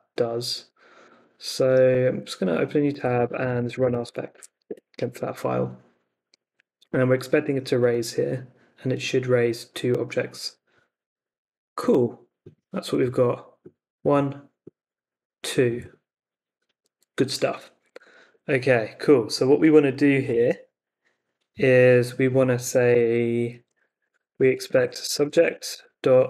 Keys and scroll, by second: 1.6 super+t, 2.7-3.8 typing, 4.3 super+v, 4.6 Return, 18.1 super+Tab, 22.5 Escape, 22.9-26.2 typing.